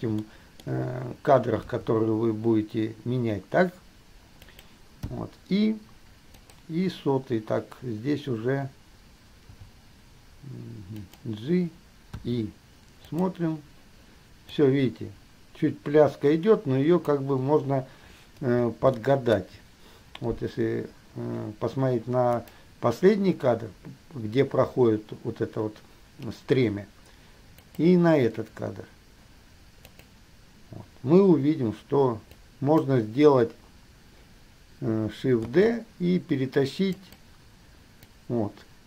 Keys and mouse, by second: 0.4-0.8 shift+middle drag, 1.8 g, 5.3 i, 6.7 click, 9.7 g, 12.4 i, 13.3 click, 14.8-17.4 drag, 19.1-19.8 shift+middle drag, 22.6 click, 27.8 click, 30.1 click, 32.7 click, 35.7 shift+d, 38.3 click.